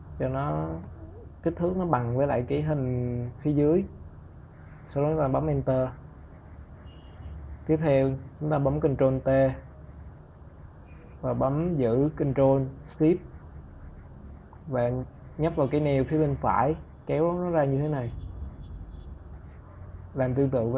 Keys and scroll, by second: 3.8 Return, 8.0 ctrl+t.